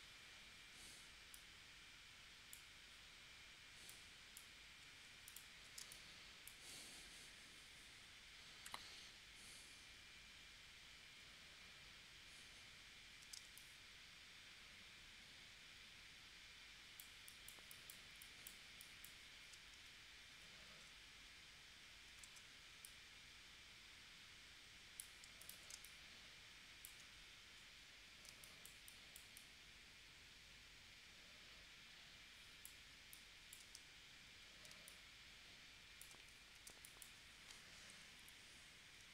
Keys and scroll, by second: 5.8 space, 13.4 space, 20.6 shift+v, 25.7 space, 28.3 space, 34.7 space, 36.7 space, 38.2 p.